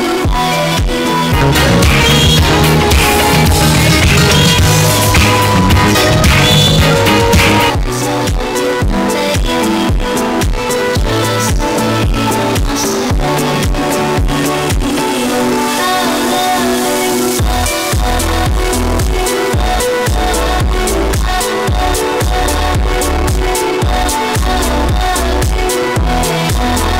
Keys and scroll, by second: 7.6 Page_Down.